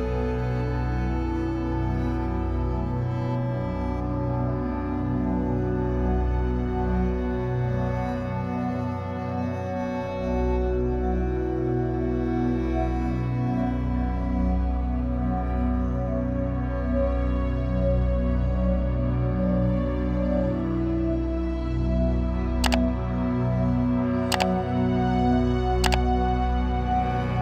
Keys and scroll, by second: 11.9 ctrl+shift+j, 20.5-21.4 typing, 23.6 space, 25.0 BackSpace, 25.3 Left.